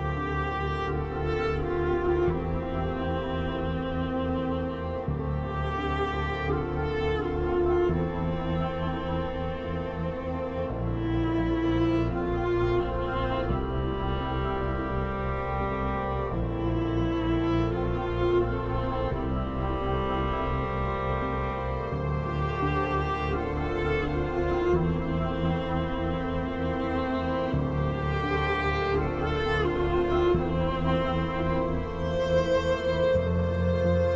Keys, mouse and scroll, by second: 0.2 click, 0.8 Escape, 1.7-5.6 drag, 5.6 F12, 6.5 click, 6.8-7.3 scroll up 1, 7.3 click, 9.3 Escape, 9.6 F3, 10.3-11.7 drag, 11.7 F4, 12.2 F2, 12.4-15.9 drag, 15.9 F3, 16.8-22.4 drag, 22.4 F3, 23.8 ctrl+z, 25.2-27.6 drag, 27.6 F3, 28.0 F4, 28.3 F2, 28.7-33.4 drag, 33.4-34.1 ctrl+right drag.